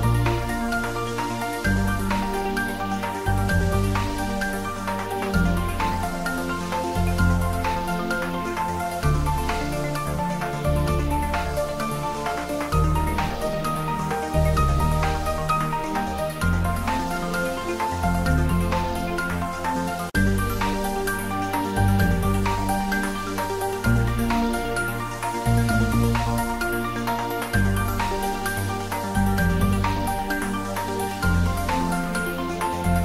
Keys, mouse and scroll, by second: 0.8 click, 4.1 click, 5.5 click, 7.7 click, 9.9 click, 12.8 click, 13.1 ctrl+s, 16.0 click, 19.0-20.4 drag, 20.8 click, 24.5-26.3 drag, 28.4 click, 28.8 ctrl+s, 31.6 ctrl+s, 32.8 ctrl+s.